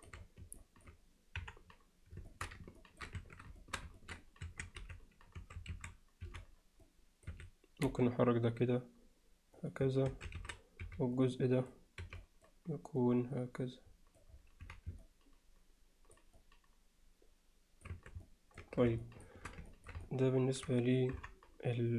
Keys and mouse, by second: 0.6 alt+middle drag, 1.4 KP_1, 2.3 alt+shift+middle click, 2.8 ctrl+alt+middle drag, 3.2 Tab, 3.6 alt+shift+middle click, 4.0 ctrl+alt+middle click, 4.5 1, 4.8 z, 5.4 a, 6.3 c, 7.9 g, 10.1 a, 10.8 b, 12.0 b, 13.0-14.2 drag, 14.6 z, 15.0-16.2 middle drag, 16.4-17.9 alt+middle drag, 18.0 Tab, 18.3-18.6 alt+middle drag, 19.0 alt+shift+middle drag, 19.7 ctrl+alt+middle click, 20.1-20.7 alt+middle drag, 21.2 KP_3.